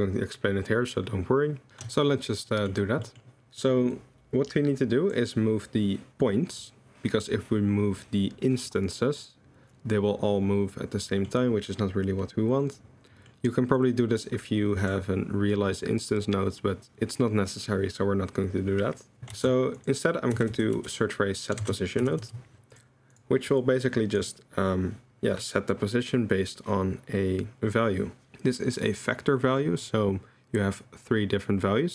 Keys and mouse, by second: 2.5 middle click, 3.1 middle click, 3.5 middle click, 3.9-5.1 drag, 11.1 middle drag, 13.8-14.9 drag, 19.3 shift+a, 23.8 click.